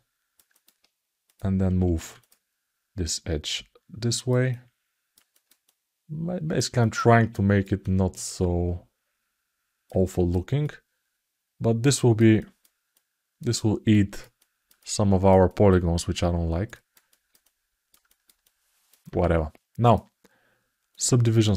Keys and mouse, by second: 0.3 alt+middle click, 1.0 click, 2.0 click, 2.8-4.0 drag, 4.2 alt+middle click, 5.1 ctrl+alt+middle click, 5.4 alt+middle click, 6.5 alt+shift+middle click, 7.0 ctrl+alt+middle click, 7.2 ctrl+alt+click, 7.5 alt+click, 9.4 alt+middle click, 9.8 ctrl+alt+middle click, 10.5-11.9 alt+middle drag, 12.2 alt+middle click, 12.7 alt+middle click, 13.7 ctrl+alt+middle click, 14.1 alt+middle click, 14.6 alt+shift+middle click, 15.2-16.4 alt+middle drag, 16.5 alt+middle click, 16.8 ctrl+alt+middle click, 17.2 alt+middle click, 17.8 alt+shift+middle click, 18.2 alt+middle click, 19.6-20.8 drag, 21.2 ctrl+alt+middle click.